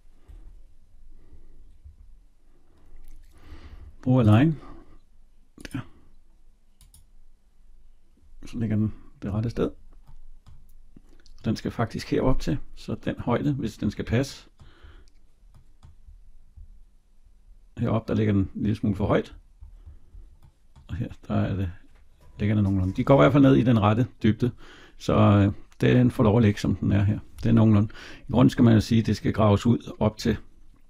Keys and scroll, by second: 9.1 Escape.